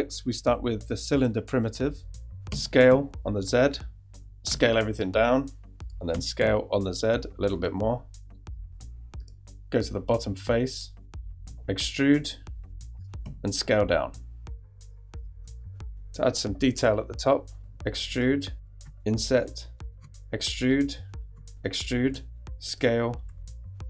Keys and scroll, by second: 2.5 s, 2.9 z, 4.5 s, 6.4 z, 11.4 e, 13.2 s, 17.5 e, 18.7 i, 19.9 e, 21.2 e, 22.1 s, 23.3 e.